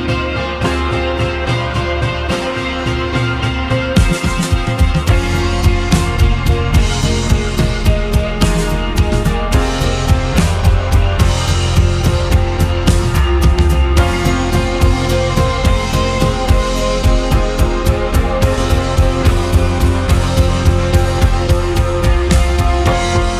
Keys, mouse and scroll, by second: 4.1 shift+d, 15.3-17.8 middle drag, 19.6-20.7 scroll down 1, 20.7 ctrl+z, 22.2 p.